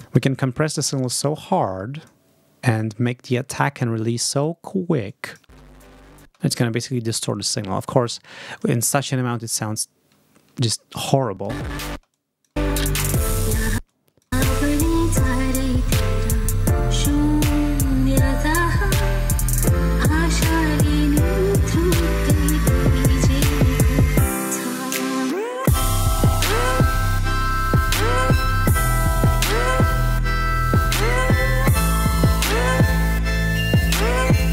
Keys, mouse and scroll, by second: 1.5 click, 4.0 click, 5.0 click, 5.3 space, 6.1 space, 8.7-9.9 drag, 11.4 space, 12.0 click, 12.4 space, 13.6 space, 13.8 click, 17.8-18.8 drag, 20.6-22.2 drag, 23.4 click, 24.8 click, 27.0-28.5 drag, 31.8 click, 33.2 click.